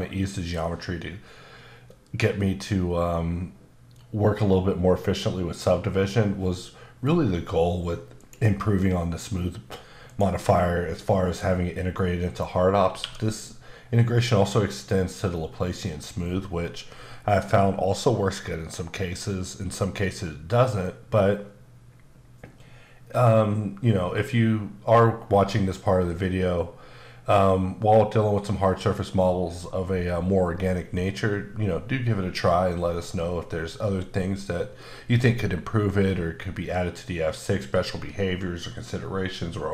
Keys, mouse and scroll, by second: 8.2 click, 10.1 click, 10.5 middle click, 13.0 q.